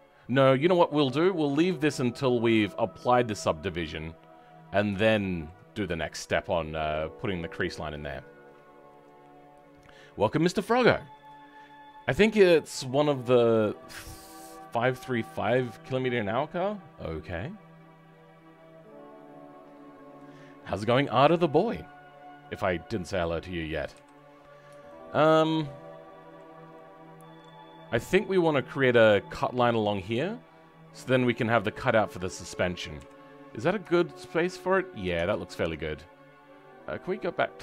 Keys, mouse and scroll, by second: 4.0-5.0 scroll down 4, 5.0 shift+middle click, 23.9 KP_3, 24.8 shift+middle click, 25.2 scroll down 3, 25.4 middle click, 26.7 middle click, 27.6-28.7 scroll up 6, 28.7-30.7 scroll up 1, 30.7-31.0 scroll down 4, 31.0-32.9 middle drag, 32.9 KP_3, 33.9 shift+middle click.